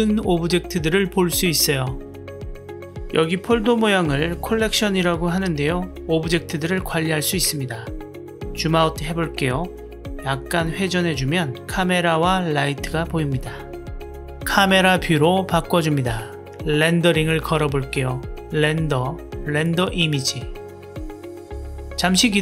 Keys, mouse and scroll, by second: 0.3 click, 0.8 click, 2.7 click, 3.0 click, 8.6-10.1 drag, 10.4-11.5 drag, 12.2 click, 13.3-15.1 drag, 19.2-22.4 drag.